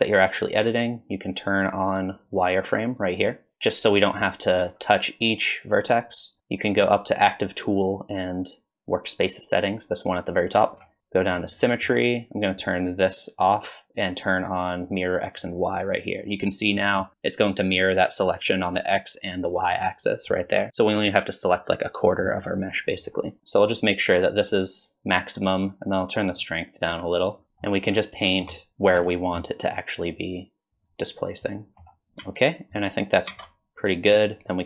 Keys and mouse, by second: 1.5-3.3 drag, 11.1 click, 13.5 click, 15.4 click, 16.8 middle click, 19.7 middle click, 22.0 middle click, 23.4 ctrl+z, 23.9 click, 26.2-27.5 drag, 27.7 click, 27.8 middle click, 28.0 middle click, 28.2 shift+middle click, 28.6 click, 28.9 ctrl+z, 29.1 click, 30.0 middle click, 30.2 shift+middle click, 30.9 middle click, 31.1 middle click, 31.3 middle click, 31.6 middle click, 33.3 ctrl+Tab.